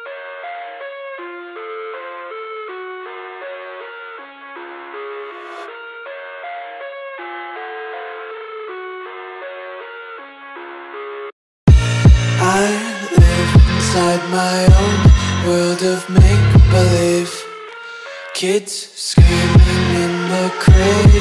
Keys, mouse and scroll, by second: 0.3 click, 5.2 alt+scroll up 1, 6.2-6.9 ctrl+scroll up 1, 7.1-8.7 ctrl+scroll up 5, 9.4 click, 9.6 right click, 10.6 click, 14.6 click, 16.4-17.1 alt+scroll up 3, 18.7 click.